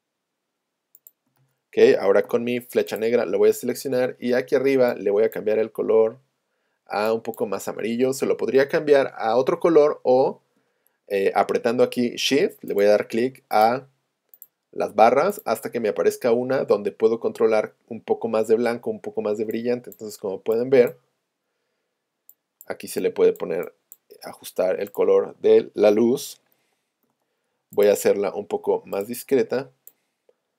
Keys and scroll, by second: 26.4 a, 27.1 p.